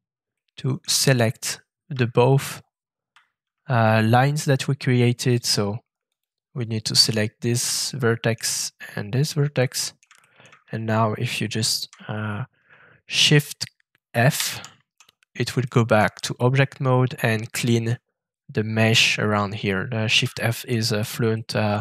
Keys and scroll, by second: 1.9 Tab, 2.4 Tab, 2.5 Tab, 14.3 shift+f.